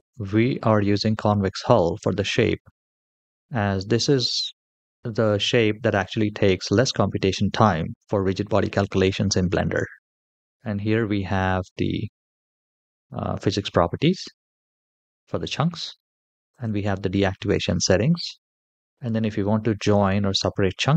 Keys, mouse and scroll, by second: 16.3 scroll down 2, 16.3 click, 16.9-17.8 scroll down 1, 17.8 scroll down 1, 18.6 click, 18.9-20.9 scroll down 1.